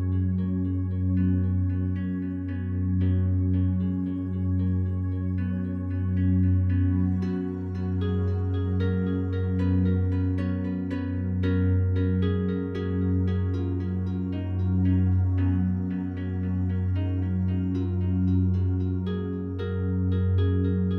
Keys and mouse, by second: 0.9-2.2 ctrl+alt+drag, 2.2 typing, 2.5 click, 3.6 typing, 4.7 click, 6.1-6.8 ctrl+alt+drag, 7.4 click, 7.9 click, 10.5-10.8 drag, 11.7-13.2 drag, 14.0 g, 15.1 drag, 15.6-17.4 drag, 19.4 g, 19.7 y.